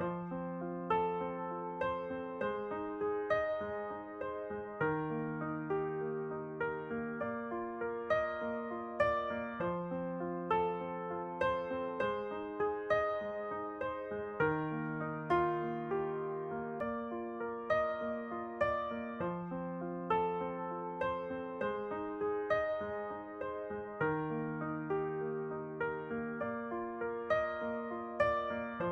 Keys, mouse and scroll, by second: 1.2-2.3 middle drag, 2.2 s, 4.6 s, 5.5-7.4 drag, 5.6 middle click, 7.5-9.3 middle drag, 8.3 x, 9.5 Tab, 9.7 middle click, 10.2 middle click, 13.0 Tab, 13.4-15.1 middle drag, 13.6 a, 14.3 a, 15.1-17.6 drag, 16.9 middle click, 17.7 click, 17.7-20.1 middle drag, 20.1 shift+d, 21.6 p, 24.5 Tab, 24.7 z, 25.1-26.8 right drag, 25.5 z, 26.1 z, 26.6-28.9 middle drag.